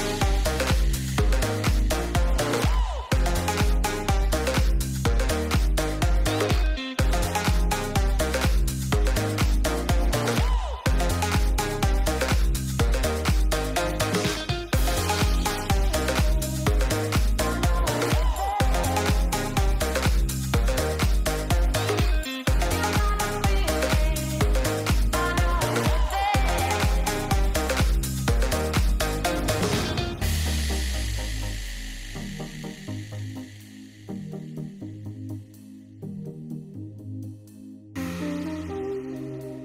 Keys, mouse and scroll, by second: 0.3 g, 3.9 click, 4.6 g, 7.3 ctrl+z, 10.2 l, 10.8 s, 12.8 g, 15.1 click, 17.3 g, 20.8 Tab, 22.4 shift+middle click, 23.4 click, 26.5 click, 28.8 shift+middle click, 30.1 click, 32.9 alt+h, 33.8 Tab, 36.3 click, 39.4 click.